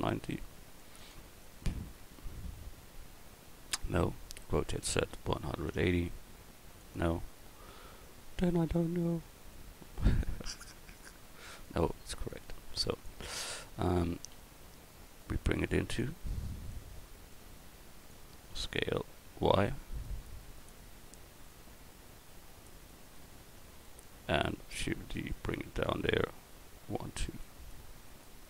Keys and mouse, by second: 2.6-6.8 middle drag, 4.5 r, 8.3 middle click, 8.6 middle click, 10.1-11.2 middle drag, 12.3-13.7 middle drag, 14.3 s, 18.5 s, 23.1 click, 23.4 middle click, 25.0 shift+d, 25.8-27.2 drag.